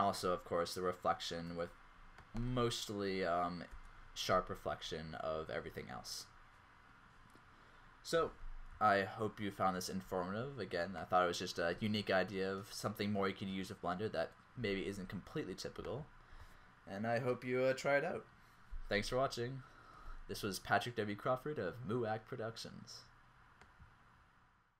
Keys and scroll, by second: 13.5 Down.